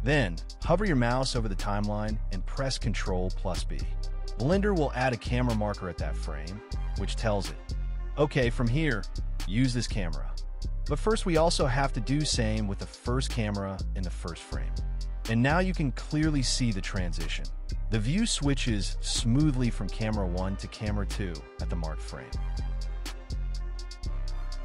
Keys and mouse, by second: 0.8 click, 3.2 ctrl+b, 4.2 click, 5.5 ctrl+b, 6.7-7.6 drag, 10.5 KP_0, 11.4-11.7 drag, 12.0 shift+Left, 12.6 middle click, 13.3 click, 14.6 ctrl+b, 15.2 click, 16.0 ctrl+b, 17.0 KP_0, 17.9 space, 23.3 space.